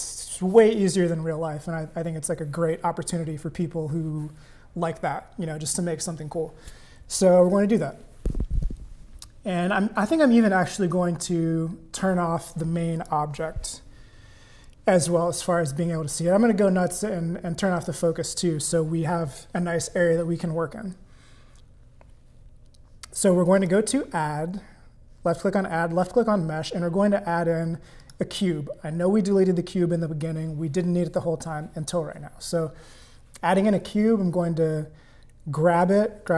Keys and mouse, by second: 13.0 click, 17.8 click, 23.6-28.1 drag, 34.6-36.3 drag.